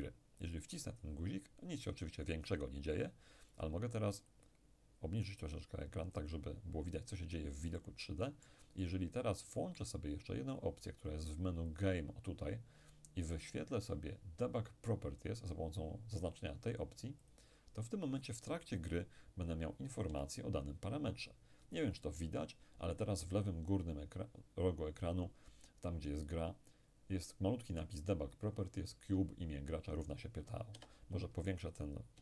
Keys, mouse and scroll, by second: 0.8 click, 4.3-7.1 drag, 7.8-10.8 middle drag, 11.7 click, 17.3 click, 20.1 p, 30.8 Escape.